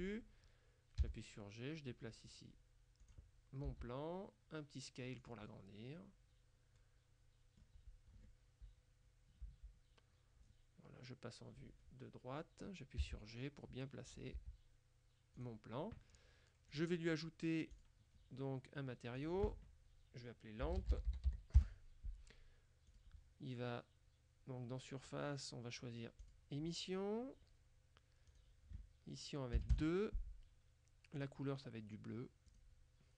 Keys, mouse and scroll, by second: 1.1 g, 3.1 click, 3.7 s, 5.3 click, 9.5 KP_3, 13.1 g, 14.2 click, 14.4 s, 15.4 click, 16.8 click, 17.8 click, 19.2 click, 20.7-21.5 typing, 21.7 Return, 23.0 click, 26.3 click, 28.4 click, 29.6 KP_2, 29.8 KP_Enter, 31.2 click, 32.6 click.